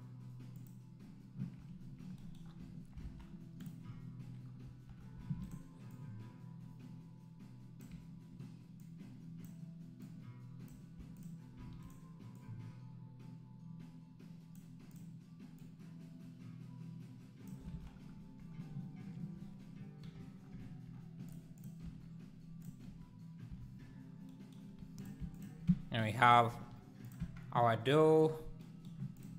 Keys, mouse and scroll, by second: 0.5 click, 3.0 alt+a, 3.2 scroll up 3, 3.7 click, 3.8 scroll down 4, 5.3 shift+d, 5.9 click, 8.8 click, 10.1 click, 11.3 shift+click, 11.5 shift+d, 12.4 Left, 14.9 Left, 15.6 Left, 17.7 alt+a, 17.8 scroll down 1, 20.0 /, 21.5 click, 21.8 Tab, 22.6 click, 22.9 3, 25.1 click, 26.5 e, 27.2 Tab, 27.4 scroll down 1, 29.2 click.